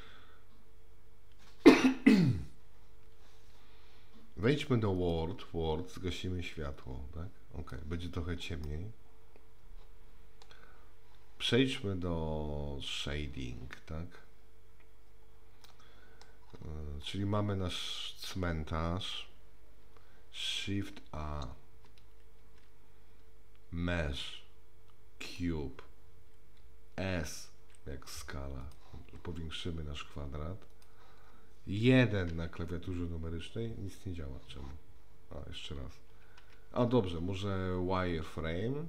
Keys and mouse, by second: 6.9 click, 8.7-10.5 middle drag, 12.9 click, 15.6-16.3 middle drag, 22.4 shift+a, 27.6 s, 29.0 s, 32.3 KP_1, 36.4 KP_1.